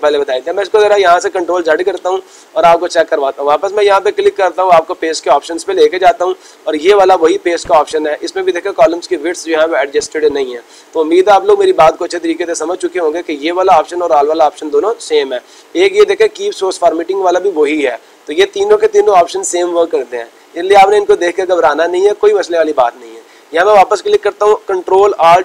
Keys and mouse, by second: 3.2 click, 4.1 click, 5.9 click, 22.7 click, 23.7 click.